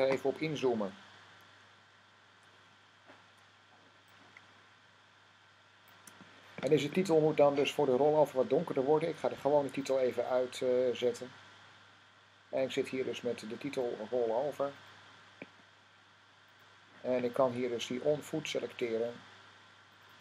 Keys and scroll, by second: 1.4 =.